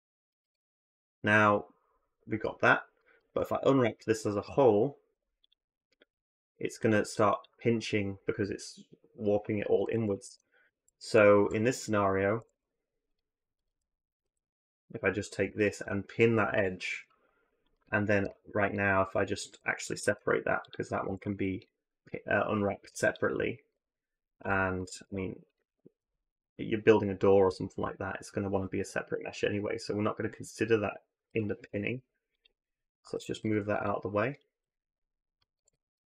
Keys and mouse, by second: 0.2 a, 0.4 a, 3.0 a, 4.9 u, 6.6 drag, 7.1 click, 10.1 ctrl+z, 10.6 ctrl+z, 12.2 a, 12.3 a, 16.3 ctrl+shift+p, 19.8 alt+m, 20.9 a, 21.0 a, 22.7 u, 23.5 a, 24.2 r, 25.0 middle click, 25.8 r, 32.9 g, 35.3 a, 35.5 a.